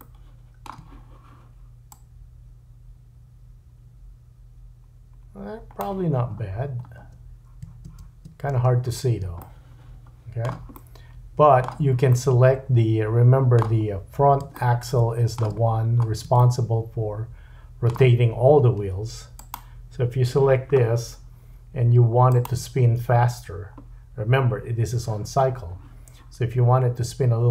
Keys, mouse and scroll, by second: 1.9-9.2 drag, 6.3-7.0 scroll down 4, 7.0 space, 8.6 space, 9.4 shift+middle click, 10.8 middle click, 12.1 middle click, 13.8-14.4 scroll up 2, 14.5 shift+middle click, 15.4 shift+scroll, 15.5-19.6 drag, 15.7-16.3 scroll up 2, 16.4 shift+middle click, 19.6-22.3 middle drag, 22.3 click, 22.4-27.5 middle drag.